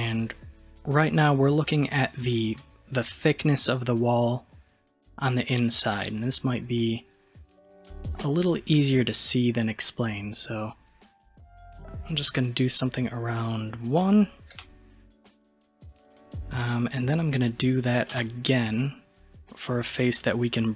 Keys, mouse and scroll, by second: 18.2 i.